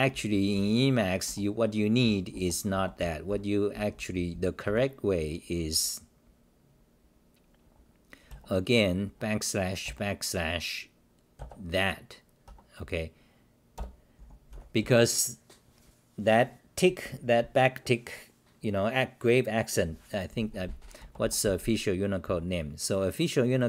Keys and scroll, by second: 0.0-4.6 typing, 2.3 Return, 2.7 Return, 8.3 BackSpace, 12.5 Home, 13.7 Delete, 13.9-15.3 typing, 22.2 w.